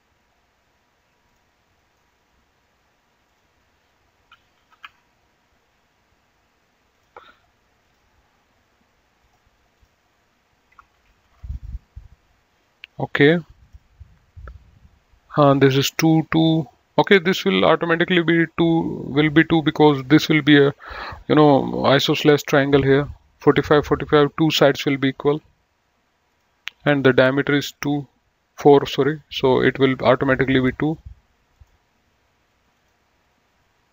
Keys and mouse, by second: 1.4 click, 1.9 right click, 3.3 click, 4.9 KP_4, 5.1 Return, 7.1 click, 11.3 KP_4, 11.5 KP_5, 11.7 Return, 13.9 click, 26.6 click, 30.5 click, 31.8 click, 33.1 click.